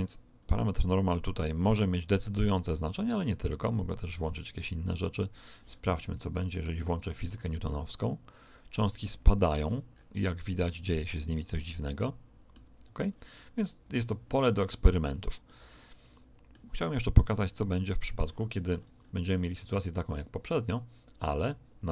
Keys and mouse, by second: 0.4 click, 2.2-4.4 middle drag, 4.4 click, 6.2 middle click, 6.5 click, 7.8 alt+a, 9.9-13.2 middle drag, 12.6 Escape, 15.4-17.8 middle drag, 17.8 right click, 19.5 middle click, 20.0 click.